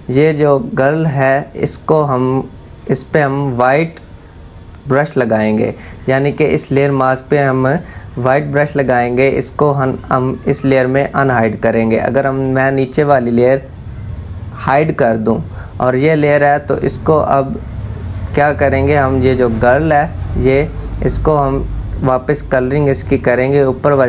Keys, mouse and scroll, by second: 19.3 click.